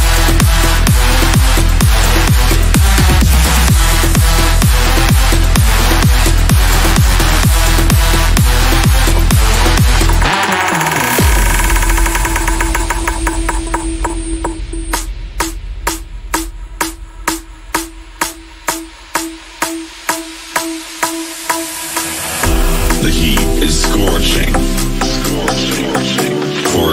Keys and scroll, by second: 4.1 Escape, 11.8 ctrl+z, 18.0 F3, 19.9 c, 21.0 F3, 21.1 Escape.